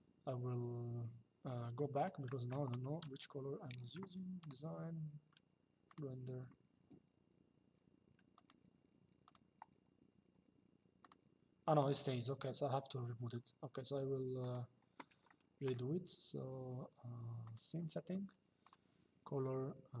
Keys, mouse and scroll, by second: 1.6 click, 4.1 click, 5.6 click, 8.1 click, 10.7 click, 14.1 click, 17.2 click, 18.3 click.